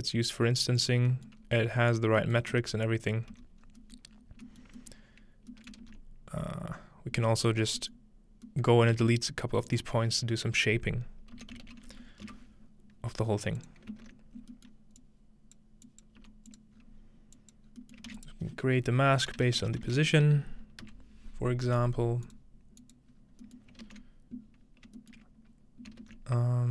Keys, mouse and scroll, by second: 0.5-1.4 scroll down 2, 1.4-1.9 scroll up 1, 1.9 click, 2.5-3.3 typing, 2.9-4.1 drag, 3.6-4.4 scroll up 1, 4.4 scroll down 1, 4.6-4.9 scroll up 2, 5.8 ctrl+space, 6.0-7.3 ctrl+middle drag, 7.5 middle click, 8.0 middle click, 8.7-10.6 shift+middle drag, 9.0 shift+a, 9.7-11.4 shift+drag, 11.4-12.7 typing, 13.6 click, 14.4-15.6 ctrl+scroll down 1, 14.4 typing, 14.6-15.0 ctrl+middle drag, 15.0-17.7 drag, 16.2 g, 16.8-17.6 scroll up 1, 17.7-18.0 scroll down 1, 18.1 typing, 18.2 shift+click, 18.3 shift+middle click, 19.4-20.3 typing, 20.8 Return, 22.3-23.7 drag, 23.1-23.7 scroll up 1, 23.5-25.4 ctrl+middle drag, 23.7-24.0 scroll down 2, 23.8 ctrl+space, 26.0 ctrl+shift+space.